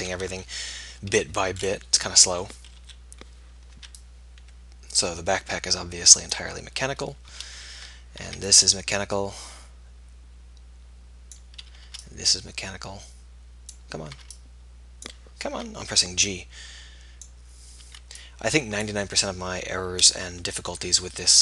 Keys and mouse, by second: 0.4 KP_1, 0.8 KP_7, 2.8 KP_3, 4.0 b, 8.5 b, 12.2 g, 14.3 g, 15.6 b, 18.0 b.